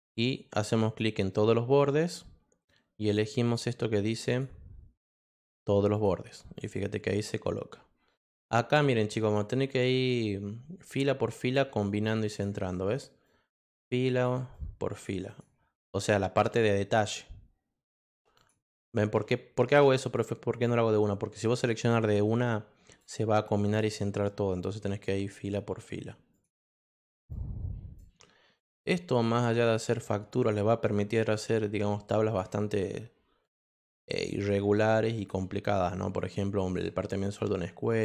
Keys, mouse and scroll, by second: 0.8 click, 4.2 click, 5.9 click, 6.5 click, 8.3-9.3 drag, 12.3 click, 13.2-14.2 drag, 14.5 click, 15.2 click, 15.8-16.9 drag, 18.3 click, 19.3-23.0 drag, 23.6 click, 24.2 click, 26.3 click, 27.3 click, 29.3 click, 30.3 click, 32.2 click, 33.4 click, 35.1 click, 36.1 click, 37.8 click.